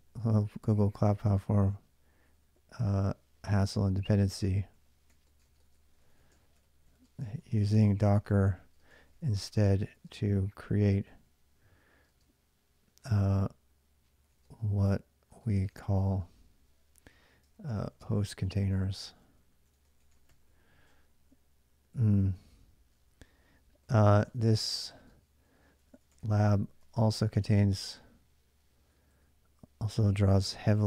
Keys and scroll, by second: 0.0-11.9 typing, 3.2 ctrl+[, 13.7-30.8 typing.